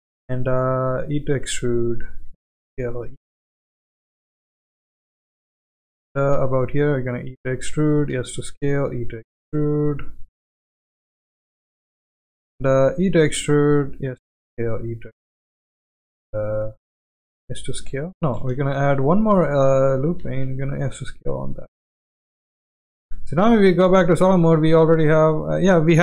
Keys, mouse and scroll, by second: 0.0 shift+click, 1.0 e, 2.2 s, 3.0 e, 6.9 e, 8.1 s, 8.9 e, 12.9 e, 13.9 s, 14.8 e, 17.3 s, 18.5 ctrl+z, 18.9 e, 20.2 s, 22.1 Tab, 22.9 z, 23.7-24.2 middle drag, 24.8 click.